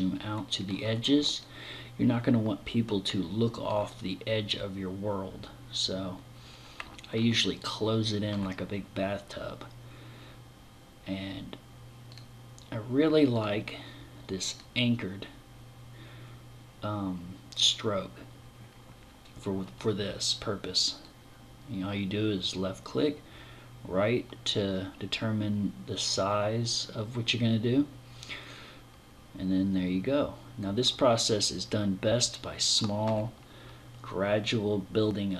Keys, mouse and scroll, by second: 0.1 scroll up 1, 0.9 middle click, 6.5 middle click, 11.6 click, 12.8 click, 20.5 click, 30.6 middle click, 33.8 click.